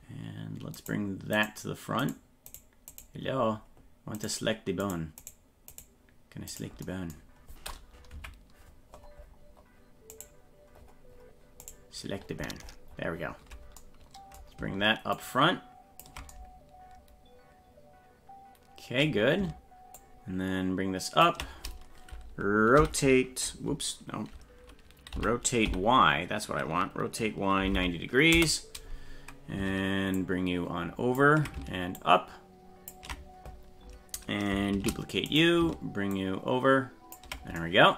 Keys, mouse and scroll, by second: 1.4 right click, 2.0 right click, 2.5 right click, 3.4-3.7 scroll up 5, 4.2 right click, 4.8 right click, 5.7 right click, 6.5 right click, 8.1 KP_Decimal, 9.1-9.9 scroll up 10, 10.1 right click, 10.7-11.4 scroll up 2, 11.6 right click, 12.1-13.2 scroll down 23, 15.1 ctrl+click, 19.9-21.2 ctrl+drag, 22.8 y, 25.1 r, 30.1-31.1 ctrl+drag, 31.9 ctrl+click, 34.7 shift+d, 36.1-37.1 ctrl+drag.